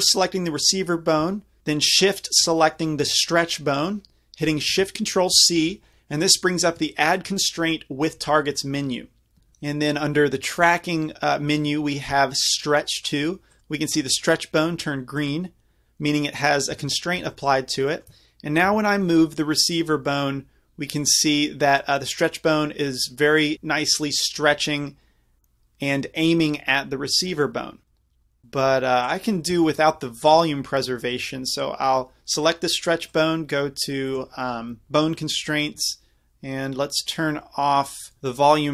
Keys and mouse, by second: 0.0-1.6 drag, 2.0-3.7 drag, 3.7 right click, 5.4 ctrl+shift+c, 15.2-19.5 drag, 18.7 g, 28.4-35.7 drag.